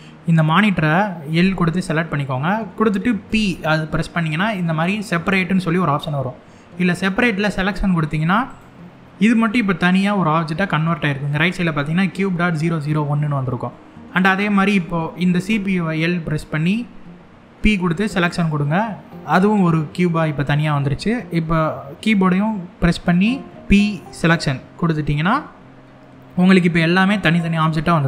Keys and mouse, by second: 1.0 l, 2.9 p, 15.1 l, 17.2 p, 21.7 l, 23.6 p, 26.9 click.